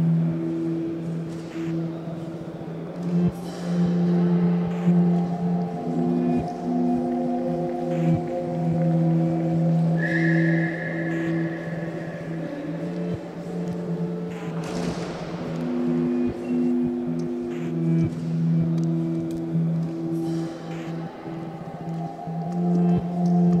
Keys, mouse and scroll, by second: 2.1 click, 2.6-9.4 ctrl+right drag, 9.4 click, 10.8 r, 12.1 shift+click, 12.6-14.3 right drag, 14.3 a, 14.5 a, 15.1 2, 15.3 click, 15.4 click, 15.8 ctrl+x, 16.3 a, 16.5 a, 16.9-18.0 shift+middle drag, 18.0 click, 18.6 3, 18.8 click, 19.3-19.7 scroll down 1, 19.7 click, 20.9-22.0 ctrl+right drag, 22.0-23.6 shift+middle drag.